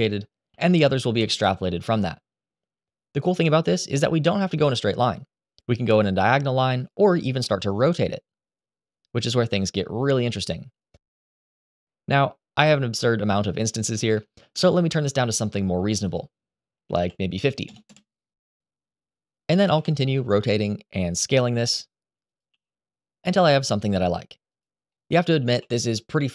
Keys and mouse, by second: 0.2 KP_7, 1.6 g, 3.3-3.9 shift+middle drag, 5.0 g, 6.5 click, 7.2 r, 11.2-12.0 middle drag, 12.2 shift+middle drag, 12.7-14.1 middle drag, 14.6-15.0 shift+middle drag, 16.5-18.4 drag, 19.4 KP_1, 20.2 r, 20.8 click, 21.2 s, 22.2 g, 24.6 middle click, 25.5 z, 26.1 shift+middle drag.